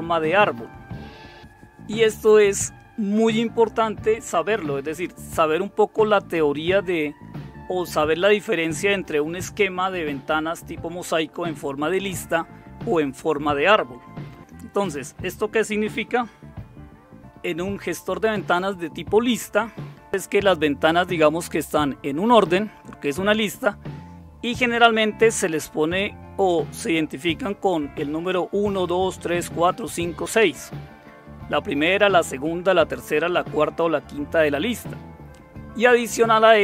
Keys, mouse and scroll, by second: 1.4 Right.